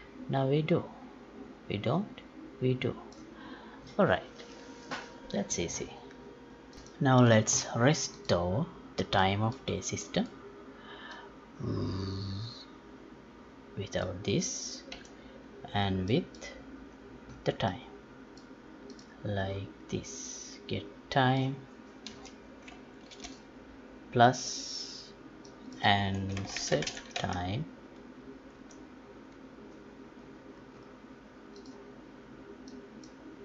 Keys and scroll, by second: 15.1 Delete, 26.9 space.